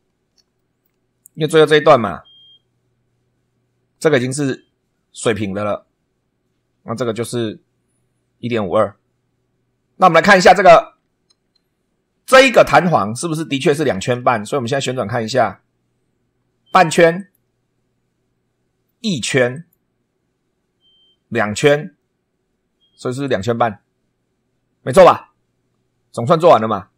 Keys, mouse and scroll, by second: 0.5 shift+middle click, 13.9 super+2, 14.5 super+right click, 15.3-15.7 scroll down 1, 17.1 click, 19.5 click, 21.3 click.